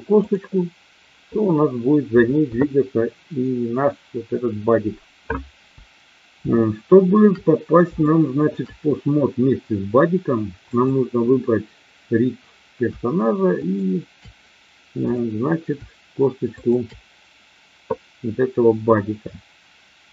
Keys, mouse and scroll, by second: 0.2 click, 6.5-7.2 shift+middle drag, 8.1 shift+middle click, 13.6 shift+click, 15.0 click, 16.6 shift+click.